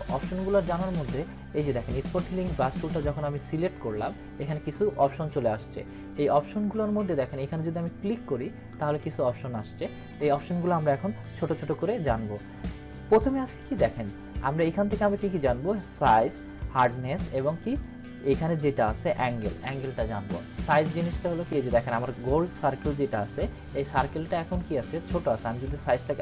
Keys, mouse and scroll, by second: 2.3-2.9 click, 7.7 click, 26.1-26.2 drag.